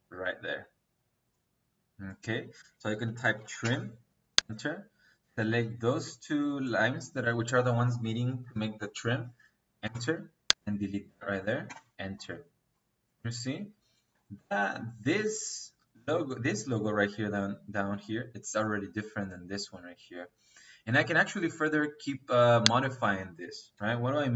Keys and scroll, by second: 2.5 Escape, 2.9-3.6 typing, 9.7 space, 11.5 -, 23.6 Escape.